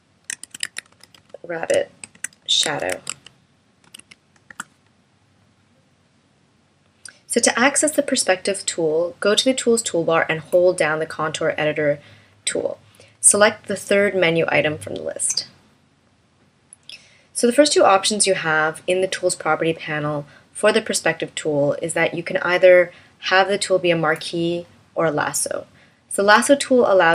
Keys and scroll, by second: 4.4 Return.